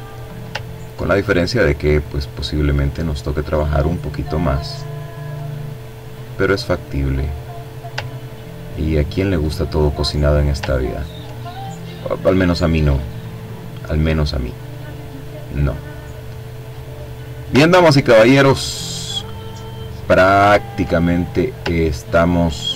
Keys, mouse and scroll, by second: 0.8-2.3 drag, 2.7-4.0 drag, 4.2-5.7 drag, 5.7-6.5 ctrl+scroll down 2, 8.1-8.7 ctrl+scroll up 2, 9.0 ctrl+click, 11.8-15.1 drag, 15.1-16.0 ctrl+scroll down 1, 16.2 ctrl+click, 16.9-17.7 ctrl+scroll up 2, 17.7-18.3 scroll down 2, 18.7 ctrl+click, 19.2-19.9 ctrl+scroll up 2, 20.6-22.2 drag, 22.6-22.7 drag.